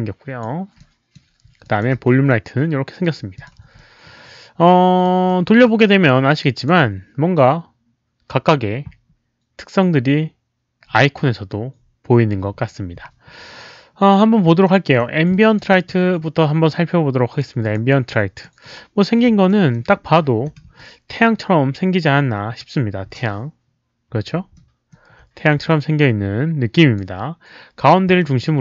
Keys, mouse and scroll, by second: 0.8-1.1 drag, 1.6 drag, 1.9 w, 2.3 middle click, 3.3 click, 3.7-5.0 alt+drag, 5.2 alt+middle click, 5.6-6.6 alt+drag, 14.6 alt+middle click, 15.3 alt+drag, 17.6 click, 17.7 alt+middle click, 18.1-18.4 drag, 19.4 alt+middle click, 19.9 alt+scroll down 1, 20.7 q, 24.5 alt+middle click, 25.7-26.9 alt+drag, 26.1 alt+middle click, 26.1 q, 28.2 alt+middle click.